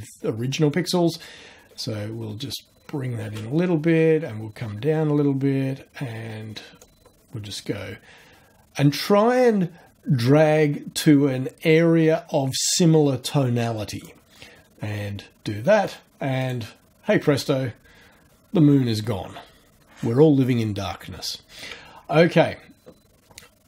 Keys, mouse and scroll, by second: 1.4-1.9 shift+scroll down 2, 2.4-3.0 shift+scroll down 4, 3.9-4.3 scroll down 2, 6.1 scroll up 2, 6.8-14.2 drag, 16.4 click.